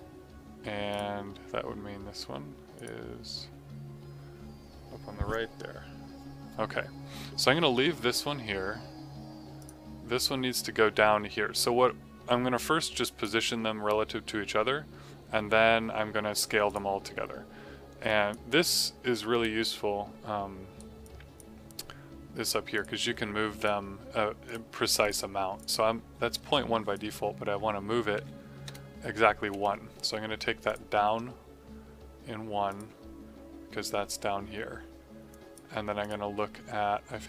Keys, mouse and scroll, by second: 0.8 click, 9.5 click, 12.7 click, 16.6 click, 19.1 right click, 21.0 click, 28.1 KP_1, 28.6 KP_Enter, 30.6 click, 35.2 click.